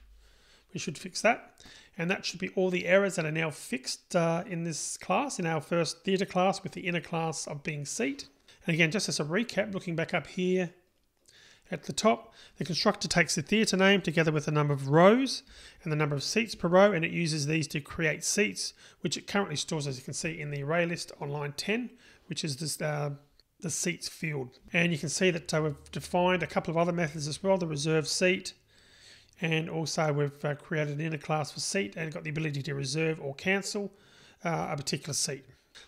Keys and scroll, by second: 0.4 super+n.